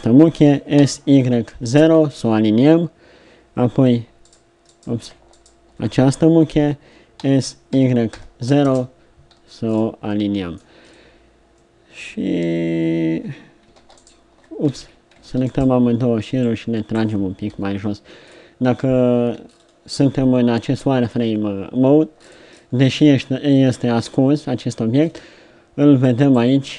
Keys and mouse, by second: 0.4 s, 7.2 s, 14.8 ctrl+z, 17.5 KP_3.